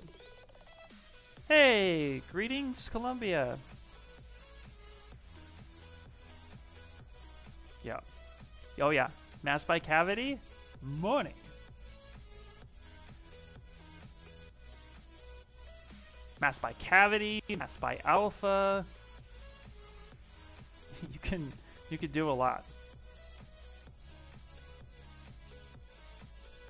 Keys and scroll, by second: 4.4 s, 9.9 s, 11.3 s, 16.6 s, 20.8 ctrl+z, 21.3 ctrl+z.